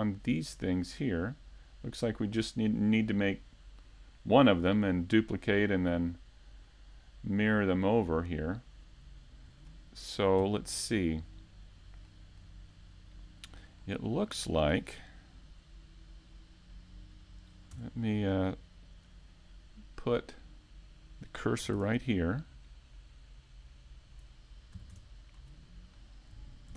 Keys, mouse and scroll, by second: 7.8 click, 9.2 middle click, 10.2 shift+middle click, 10.6 scroll up 1, 11.3 scroll up 1, 11.4 click, 12.3 middle click, 12.8-13.1 scroll down 2, 13.1 middle click, 13.9 scroll down 1, 14.3 shift+middle click, 15.7 click, 21.1 middle click, 24.1-25.1 scroll up 3, 24.5 middle click, 25.3 scroll up 1, 25.6 shift+middle click, 25.8 shift+middle click.